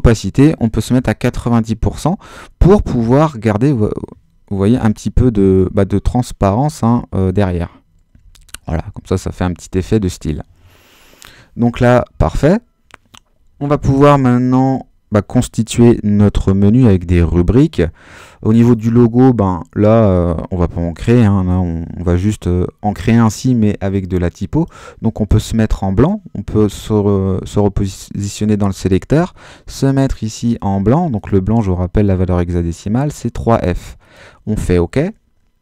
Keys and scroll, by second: 1.0 9, 1.2 0, 4.7 super++, 8.2 super+d, 8.6 super+-.